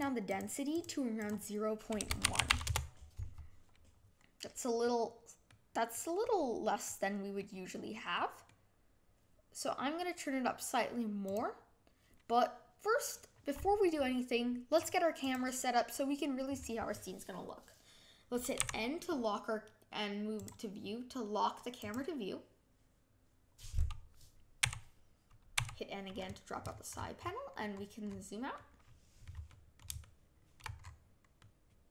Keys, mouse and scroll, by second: 0.2 click, 0.7 click, 1.2-4.4 drag, 4.4-14.7 middle drag, 14.7 click, 15.2 click, 18.5 n, 21.7-25.5 drag, 25.5 n, 26.0-27.7 scroll down 30, 27.7-28.5 scroll up 5, 28.5-30.7 middle drag, 30.7 scroll up 5, 31.3-31.9 middle drag.